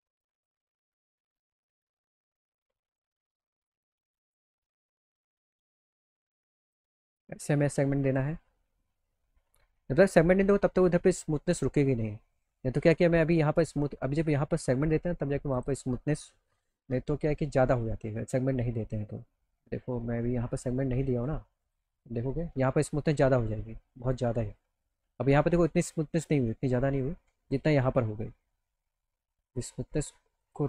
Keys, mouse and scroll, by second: 0.8 click, 2.1 click, 2.9 alt+middle click, 4.3 click, 6.6 click, 7.6 click, 9.7 alt+middle click, 12.3 alt+click, 13.6 click, 15.5 click, 16.8 e, 21.6 click, 23.8 alt+middle click, 28.3 alt+middle click, 30.4 click.